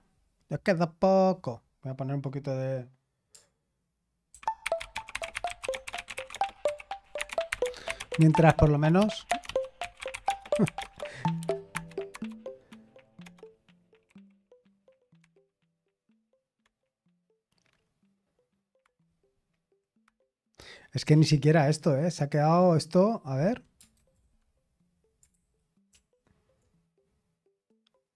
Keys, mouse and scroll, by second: 4.3 super+z, 23.9 ctrl+c, 25.3 super+h, 25.9 super+l.